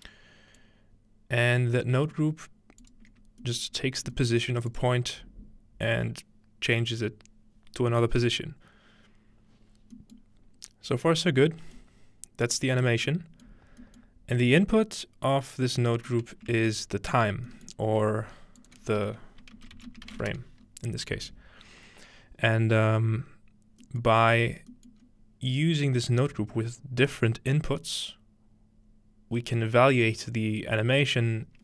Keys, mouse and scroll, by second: 0.6-1.9 drag, 2.8 shift+click, 3.6 middle click, 3.8-6.0 scroll up 2, 4.4-6.0 middle drag, 4.7 click, 9.0-9.9 scroll down 2, 9.9-11.1 scroll down 1, 10.2-11.2 middle drag, 12.9-14.7 scroll down 2, 15.1 middle click, 16.1-17.5 middle drag, 17.3-17.6 scroll up 1, 17.7-19.2 ctrl+middle drag, 18.6 click, 19.0 F2, 19.5-20.8 typing, 24.1-24.4 middle drag, 24.4-25.0 scroll down 2, 25.0-26.1 scroll up 2, 25.5 click.